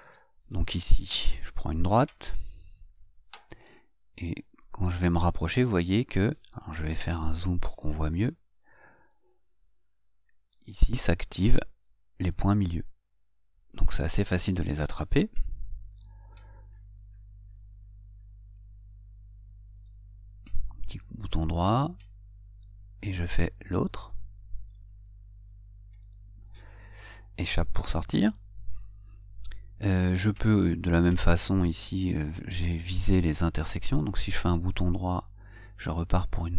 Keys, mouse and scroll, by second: 3.1 click, 7.4 scroll up 2, 8.1 scroll up 2, 11.1 click, 16.2 Escape, 17.1 scroll up 2, 18.0 scroll down 2, 18.7 scroll down 2, 20.1 right click, 23.0 click, 26.3 click, 27.3 Escape, 34.3 right click, 35.8 click.